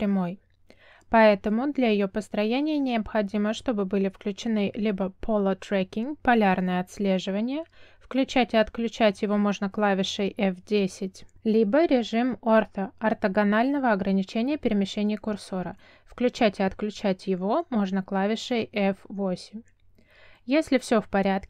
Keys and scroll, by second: 9.6 F10, 11.4 F10, 16.9 F8.